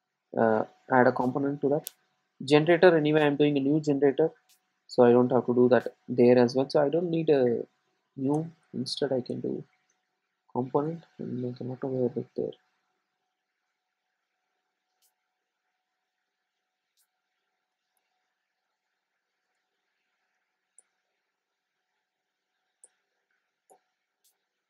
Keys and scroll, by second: 11.0 Return, 21.4 alt+Return.